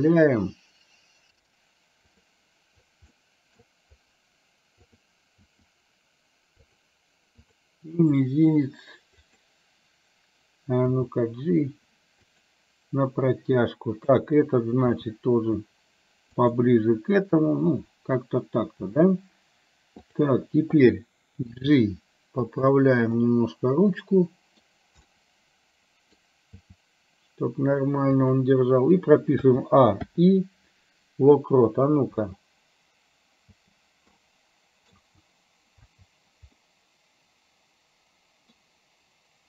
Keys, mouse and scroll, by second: 3.3 middle click, 5.0 click, 5.5 r, 8.0 r, 11.1 g, 15.0 r, 20.1 click, 21.6 g, 23.2-24.6 middle drag, 25.2-26.4 middle drag, 26.6 g, 29.5 a, 30.1 i, 32.3 space, 33.6 space, 34.3 middle click, 35.0 space, 35.9 space, 36.8-38.6 middle drag.